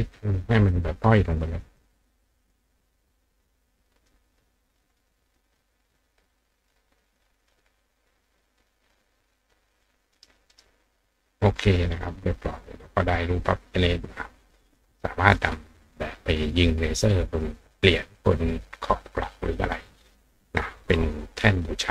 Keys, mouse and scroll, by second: 1.8 click, 2.5 click, 3.2-4.1 drag, 4.8-5.4 drag, 5.6 click, 6.5 click, 7.4 drag, 8.6 click, 9.7 click, 10.2 right click, 10.5 right click, 11.4 click.